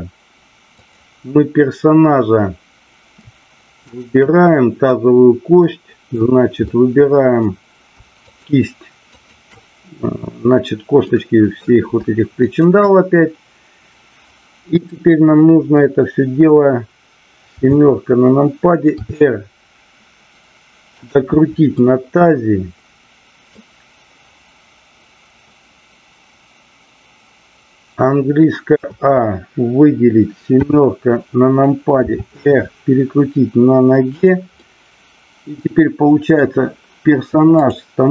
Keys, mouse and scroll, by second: 0.8 click, 3.8-4.8 shift+drag, 5.5-6.2 middle drag, 6.5-7.4 middle drag, 8.3-9.1 shift+drag, 11.1-11.6 middle drag, 12.6 shift+click, 17.5 KP_7, 18.9 r, 21.8-23.5 middle drag, 30.5 KP_7, 32.0 r, 34.2 click, 34.6-36.3 middle drag, 37.6-38.1 drag.